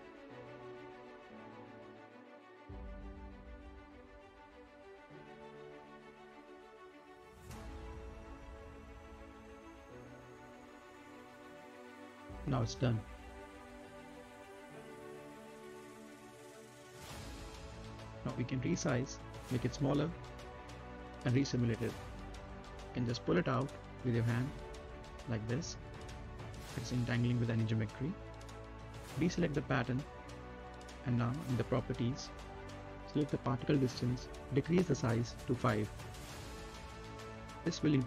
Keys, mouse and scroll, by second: 2.1 click, 2.4-3.8 right drag, 3.8-5.4 drag, 5.4-7.3 right drag, 7.3-8.9 drag, 8.9 space, 10.2 right click, 11.0 click, 12.0-12.6 scroll up 1, 12.6 right click, 13.7 space, 13.9 click, 14.2-14.6 scroll down 1, 14.6 right click, 14.8-15.2 scroll up 2, 15.0 middle click, 15.2 right click, 16.3 click, 17.1 scroll up 1, 17.2 middle click, 17.5 z, 18.1 click, 19.2 Up, 21.2 space, 22.4 right click, 22.7 middle click, 23.0-24.0 scroll down 2, 23.3 middle click, 24.0 click, 25.0 scroll up 1, 25.2 right click, 25.7 middle click, 26.4-27.8 drag, 27.8 space, 28.6 click, 29.0 right click, 29.4-29.8 scroll down 1, 29.8 middle click, 30.8 click, 31.7 a, 32.0 click, 32.4 scroll up 1, 32.6 middle click, 33.0 scroll down 1, 34.1-36.2 drag, 36.2 5, 36.9 click, 37.6 space.